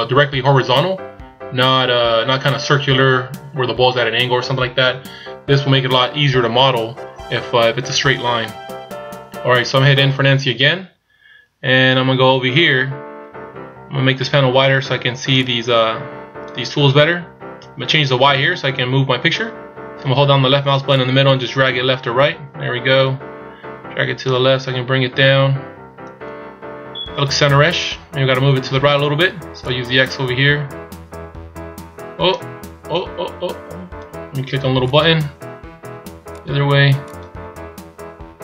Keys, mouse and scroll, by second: 8.5-10.4 scroll up 1, 10.4 n, 11.8-13.6 scroll up 4, 15.4 click, 21.0 click, 29.7 click, 35.1 click, 36.4 click, 37.2 click.